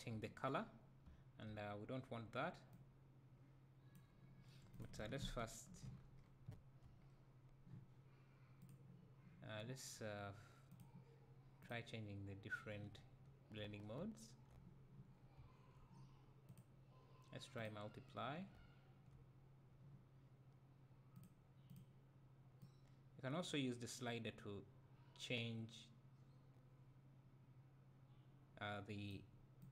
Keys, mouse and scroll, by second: 2.8-4.8 drag, 5.9 scroll down 1, 6.5 `, 7.0-7.6 scroll up 2, 11.8-13.5 drag, 12.9 `, 13.8 scroll up 2, 14.0 `, 15.1 scroll down 2, 15.4 `, 17.7 click, 18.5-26.6 drag, 18.6 `.